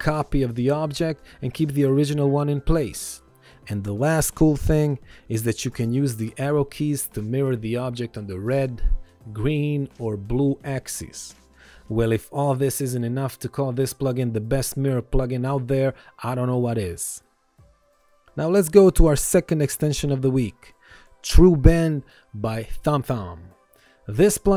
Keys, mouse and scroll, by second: 0.6 click, 1.8 click, 2.8 click, 3.6 click, 4.9 ctrl+z, 5.2 ctrl+z, 5.8 ctrl+e, 6.0 click, 7.4 ctrl+1, 8.8 Right, 9.5 Left, 10.3 Up, 10.7 Right, 11.1 Left, 11.4 Up, 11.8 Right, 12.2 Left, 12.4 Up, 12.8 Down, 13.1 Up, 13.4 Left, 13.8 Up, 14.1 Right, 15.4 click, 16.5 ctrl+click, 17.7 ctrl+click, 19.4 click, 21.7 ctrl+1, 22.0 click.